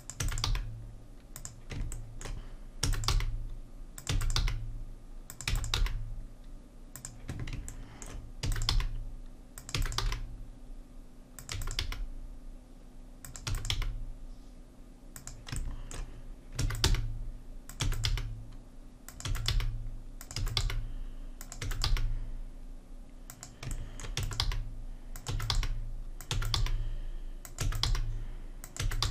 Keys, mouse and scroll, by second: 0.2 e, 0.5 g, 2.8 e, 3.2 g, 4.1 e, 4.4 g, 5.5 3, 5.6 e, 5.8 g, 8.4 e, 8.7 g, 9.8 e, 10.0 g, 11.5 e, 11.9 g, 13.5 e, 13.8 g, 16.6 e, 16.9 g, 17.9 e, 18.1 g, 19.3 e, 19.5 g, 20.4 e, 20.6 g, 21.7 e, 21.9 g, 23.8 middle click, 24.2-26.6 typing, 27.6 e, 27.9 g, 28.8 e.